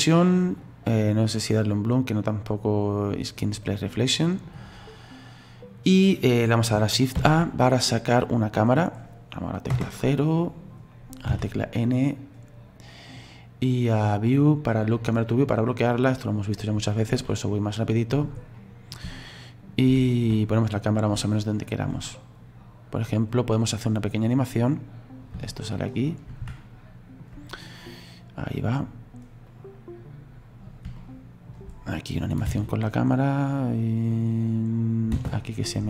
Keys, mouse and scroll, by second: 0.5 click, 1.1 click, 1.3 click, 1.7 click, 3.0 click, 3.8-4.8 middle drag, 4.8-5.6 scroll down 3, 5.6-8.6 scroll down 1, 8.6 shift+a, 9.7 KP_0, 10.4-10.9 scroll down 1, 10.9-11.3 scroll up 2, 11.3 n, 15.3 click, 15.9-17.7 scroll down 14, 17.7 middle click, 18.5 scroll up 1, 18.6-23.6 middle drag, 23.6-25.6 drag, 25.6-28.0 shift+middle drag, 28.0-30.7 drag, 31.0-32.5 shift+middle drag, 32.5 space, 35.2 space.